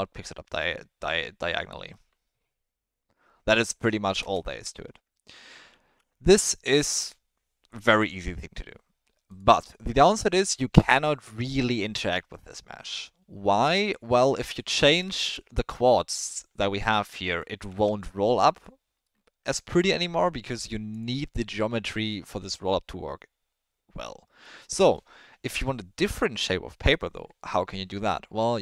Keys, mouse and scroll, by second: 4.2 space, 5.1 ctrl+z, 5.6 ctrl+z, 6.3 Tab, 6.5 middle drag, 7.9 click, 10.7-11.0 middle drag, 11.2 Tab, 15.1 shift+middle click, 17.1 middle click, 17.7 Tab, 19.0-19.8 middle drag, 24.4-24.9 middle drag.